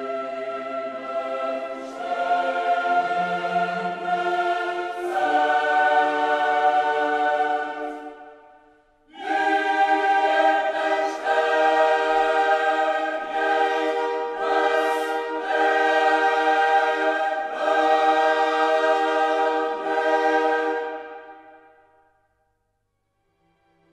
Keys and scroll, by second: 1.7 ctrl+alt+shift+e.